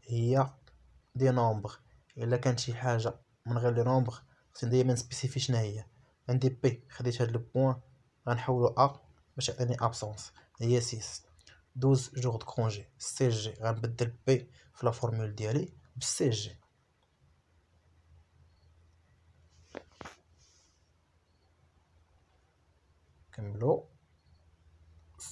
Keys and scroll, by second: 1.2 shift+3, 2.3 BackSpace, 2.6 3, 12.5 shift+p, 13.9 Return, 23.7 BackSpace, 24.1 shift+a, 25.1 Return.